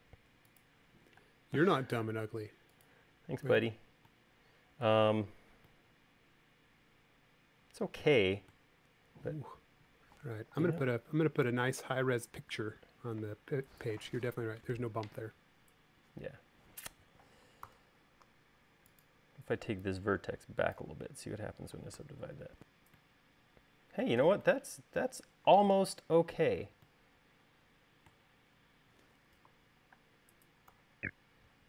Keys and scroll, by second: 1.3 space, 11.6 u, 17.8 v, 22.1 u, 26.1 Home, 26.5 Home, 29.5 Escape, 30.2 space, 30.9 `.